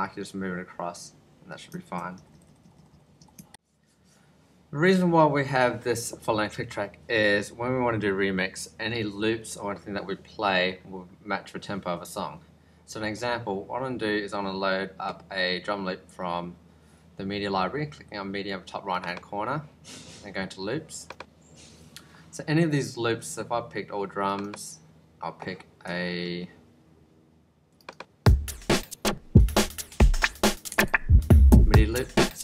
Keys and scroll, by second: 2.0 ctrl+Left.